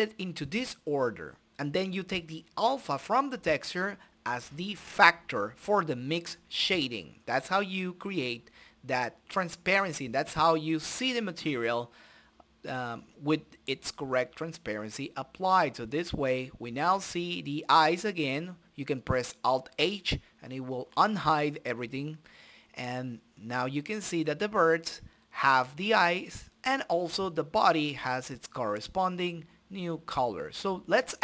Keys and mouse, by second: 1.6-4.4 drag, 5.0-6.3 drag, 9.9 click, 10.8 shift+z, 12.1 click, 13.2-14.5 middle drag, 14.5 click, 16.0-17.6 drag, 17.2-18.5 middle drag, 18.5 click, 18.5 shift+a, 21.2 click, 22.1 middle click, 22.6 click, 23.2 right click, 23.5 click, 23.8 shift+a, 27.3-28.6 middle drag, 28.6-29.9 drag, 30.5 click.